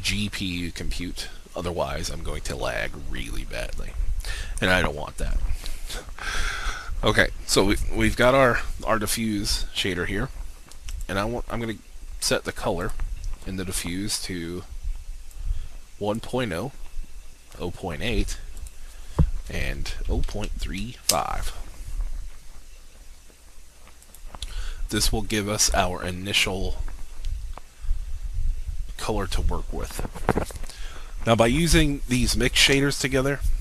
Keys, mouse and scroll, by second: 20.0-20.8 typing, 21.1 Return, 24.0-33.6 drag.